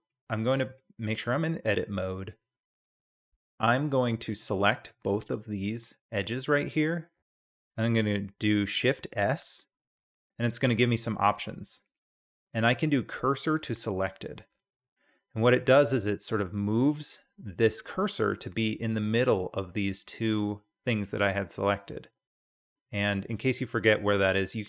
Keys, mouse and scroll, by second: 0.1-0.6 middle drag, 0.6 Tab, 1.2-2.4 middle drag, 3.1-3.9 middle drag, 4.3 2, 4.7 click, 5.7 shift+click, 9.1 shift+s, 15.4-18.5 drag, 20.6 middle drag, 20.7-21.9 drag.